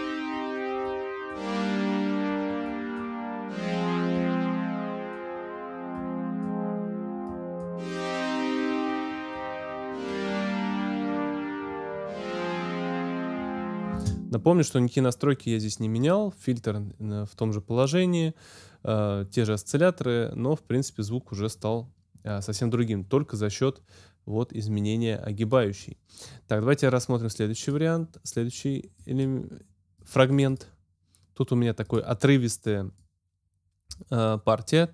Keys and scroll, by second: 13.9 space.